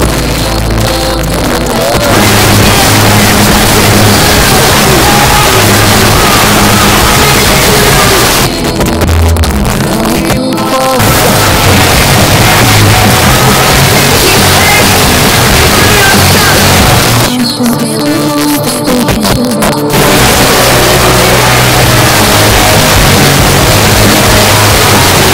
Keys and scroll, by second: 8.3 Page_Down, 17.0 Page_Down.